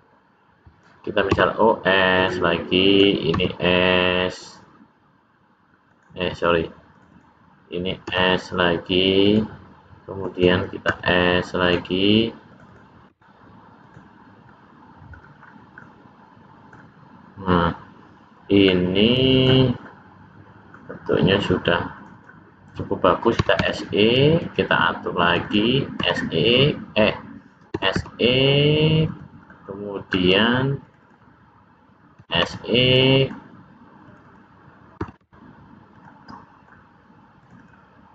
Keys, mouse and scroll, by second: 1.2 s, 2.8 click, 3.3 s, 6.9 click, 7.1 click, 8.0 s, 10.1 click, 10.3 click, 10.8 s, 12.4 click, 12.6 click, 13.0 s, 14.4 middle click, 15.3 scroll down 2, 15.7 middle click, 18.6 middle click, 21.9 click, 22.1 click, 23.3 s, 25.2 click, 25.4 click, 25.9 x, 27.6 s, 29.4 scroll down 1, 30.1 scroll up 1, 30.7 click, 31.0 click, 32.1 s, 34.0 click, 34.2 click, 34.9 s, 36.2 middle click, 37.3 click, 37.5 click.